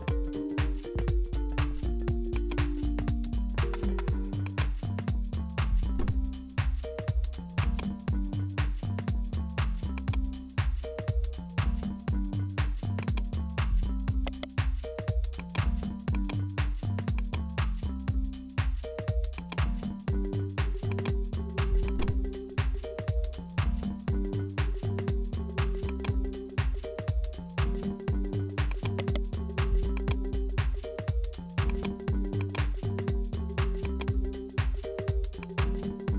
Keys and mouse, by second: 0.4 g, 2.8 s, 4.8 e, 8.4 e, 10.2 s, 11.7 e, 13.3 s, 14.8 e, 16.1-18.7 drag, 18.7 s, 19.7 g, 21.9 click, 23.9 i, 26.6 e, 28.9 right click, 29.9 click, 31.8 click, 32.4 click, 33.9 click, 34.6 click.